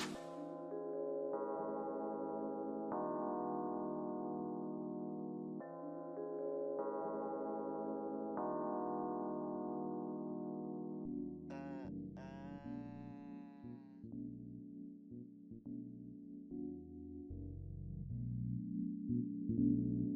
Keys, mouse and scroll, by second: 3.5-4.3 scroll down 1, 4.6 typing, 5.3 scroll up 1, 5.7 alt+click, 6.9-8.8 typing, 7.9 scroll up 1, 8.5 alt+click, 9.9 typing, 10.5 scroll down 1, 12.0-12.8 typing, 12.4 alt+middle click, 12.8 scroll down 1, 13.8 alt+middle click, 14.2 alt+click, 14.9 alt+middle click, 15.2 alt+click, 15.7 alt+middle click, 16.1 scroll down 2, 16.4 alt+middle click, 18.6 alt+middle click, 19.0 alt+click, 19.7 alt+middle click.